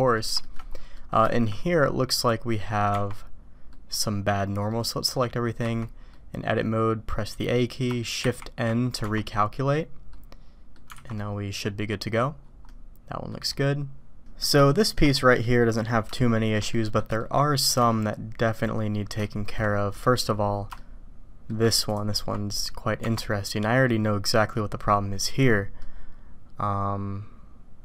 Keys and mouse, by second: 0.4 shift+middle click, 0.9 middle click, 1.3 shift+middle drag, 2.6 middle click, 3.7 click, 4.7 click, 5.6 a, 6.1 click, 8.3 shift+n, 9.0 Tab, 10.1-10.7 drag, 10.9 alt+a, 11.1-11.6 drag, 12.6 click, 14.7-15.0 shift+drag, 15.4-15.9 middle drag, 16.1-16.5 shift+middle drag, 16.7 middle click, 17.2-17.7 shift+middle drag, 17.9 middle click, 19.2-19.6 shift+drag, 19.9 click, 20.8-21.5 shift+drag, 25.8-27.8 drag.